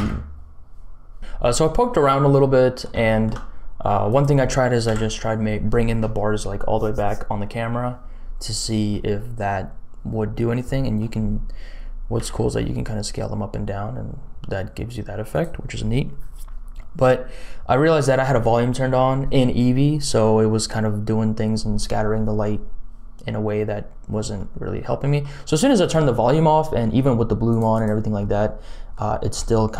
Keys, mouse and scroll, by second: 0.0 ctrl+space, 2.0-2.4 scroll down 2, 2.3 middle click, 3.0 shift+middle click, 4.0 click, 4.8 KP_Decimal, 8.0-8.8 scroll down 4, 8.8 middle click, 9.7-10.6 scroll down 3, 10.6 middle click, 11.1-11.6 scroll down 2, 12.1 s, 23.2-24.3 scroll down 4, 24.7 middle click, 26.2-26.8 scroll down 2, 27.6 click, 27.7 click, 28.1 middle click, 29.1 scroll up 1, 29.6 middle click.